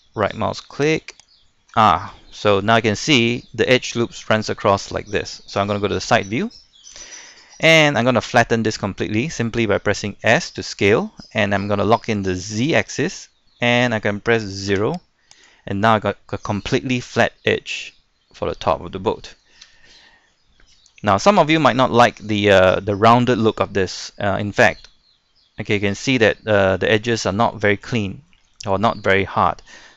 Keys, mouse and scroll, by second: 1.1 alt+right click, 1.9 scroll down 1, 2.4 shift+middle click, 5.7 KP_3, 6.6 shift+middle click, 10.2 s, 12.6 z, 14.7 0, 15.3 click, 16.1-19.5 middle drag, 19.7 Tab, 20.0-20.4 scroll down 1, 20.4 middle click, 20.9 scroll up 1, 21.3 shift+middle click, 21.7-22.0 scroll up 1, 22.0 scroll down 1, 22.3-24.0 middle drag, 24.0-24.5 scroll up 1, 24.5-26.9 middle drag, 26.9 scroll down 1, 27.5 shift+middle click, 27.8 shift+middle click, 28.8 middle click.